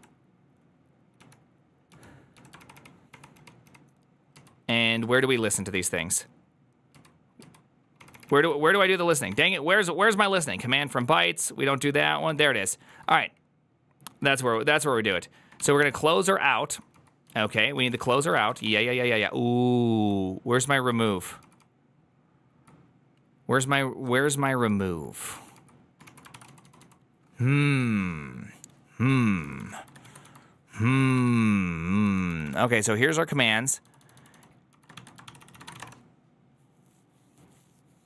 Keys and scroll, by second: 1.0-2.4 typing, 2.4 ctrl+d, 2.6 ctrl+d, 3.2 ctrl+d, 4.1 ctrl+d, 4.3 ctrl+u, 4.5 ctrl+u, 5.3 ctrl+u, 7.1 ctrl+u, 7.3 ctrl+u, 8.0 ctrl+d, 8.1 ctrl+d, 8.6 ctrl+d, 9.4 ctrl+d, 11.2 ctrl+d, 12.1 ctrl+d, 12.2 ctrl+d, 12.4-21.1 typing, 18.0 ctrl+c, 22.2 k, 23.7-26.6 typing, 26.2 ctrl+c, 29.3-36.0 typing.